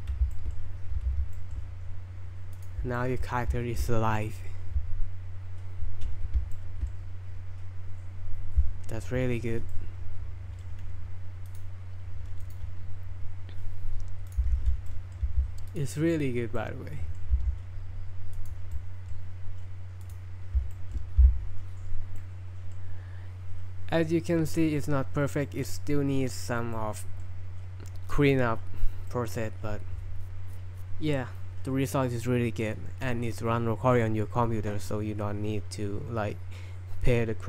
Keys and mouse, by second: 0.3 shift+drag, 1.0 n, 1.4 shift+middle click, 2.6 click, 3.0 middle click, 6.5-6.9 shift+middle drag, 9.7-10.7 middle drag, 11.5 click, 12.5 right click, 14.3 click, 14.5 shift+s, 14.9 middle drag, 15.2 g, 15.7-16.6 drag, 16.6-17.2 middle drag, 17.3 g, 18.4-18.7 drag, 18.8-19.1 middle drag, 20.0 click, 20.7 shift+middle drag, 22.2-22.7 middle drag, 25.4 middle click, 26.8-27.3 middle drag, 29.1 middle click.